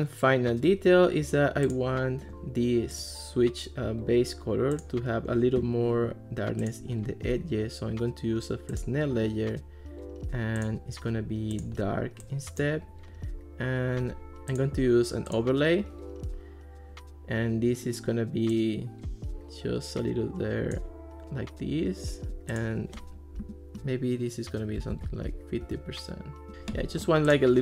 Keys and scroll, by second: 24.6-25.5 typing, 25.6 Return.